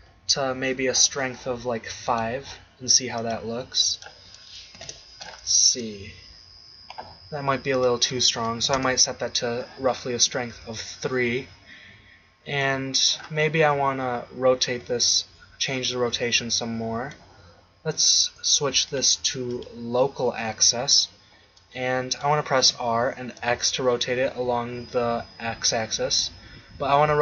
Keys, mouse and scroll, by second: 0.0 ctrl+Down, 5.3 click, 5.7 shift+z, 7.9-9.9 drag, 10.5 z, 12.6 KP_1, 14.8 z, 22.6 r.